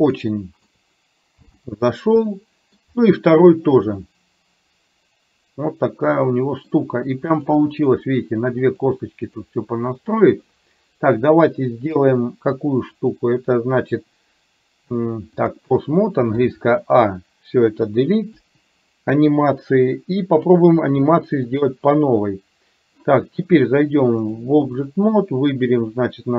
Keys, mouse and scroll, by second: 0.3 shift+middle click, 1.4 n, 2.4 shift+middle click, 4.0-6.8 middle drag, 8.7 click, 9.4 click, 12.0 KP_1, 13.0-15.7 drag, 16.5 a, 18.4 Delete, 21.5 click, 24.4 click, 25.5 click.